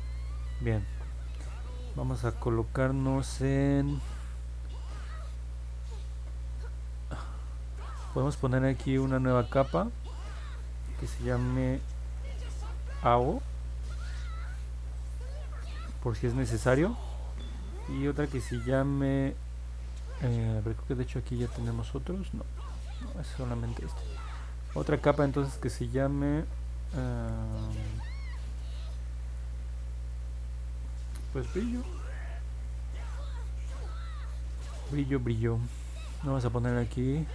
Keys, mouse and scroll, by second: 10.4 click, 12.3 a, 12.5 o, 13.5 Return, 21.8 click, 25.6 click, 32.1 r.